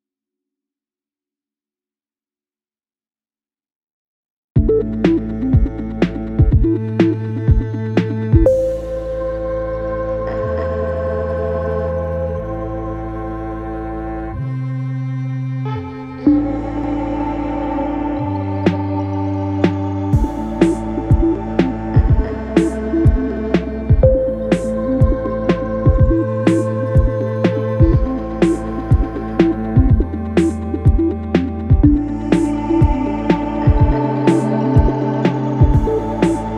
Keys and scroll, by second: 1.1 4, 2.3 2, 5.9 f, 8.6 F1, 12.6 F1, 29.8 ], 31.5 ], 34.8 4.